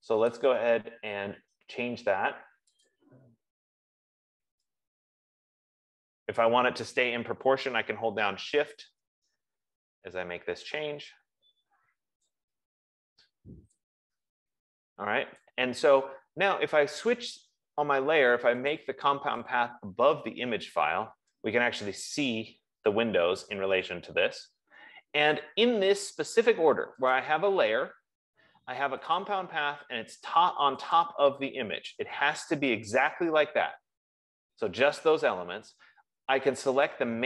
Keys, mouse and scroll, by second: 0.6 click, 3.3 click, 5.8 F15, 12.6 shift+click, 15.6 click, 19.1 click, 21.1 click, 27.5 click, 29.6 click, 31.4 click.